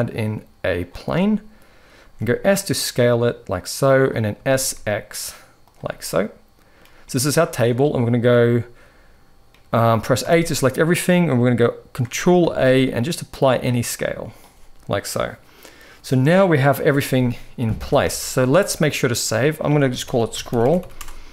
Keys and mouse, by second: 1.7 s, 4.0 s, 5.8-6.5 middle drag, 6.8-7.4 middle drag, 9.3-9.7 middle drag, 9.9 a, 10.4 middle click, 12.1 ctrl+a, 17.0-17.5 middle drag, 17.5 ctrl+s.